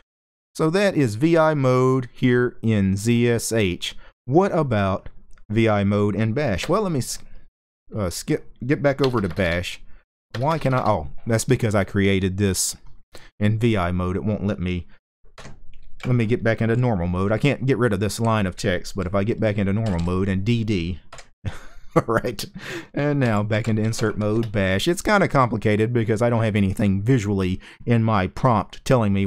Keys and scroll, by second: 0.0-1.1 typing, 6.3 BackSpace, 7.0-7.3 BackSpace, 8.7-10.4 typing, 15.0 Escape, 16.4-18.0 typing, 19.3-20.0 typing, 20.8 Escape, 22.7-24.2 typing.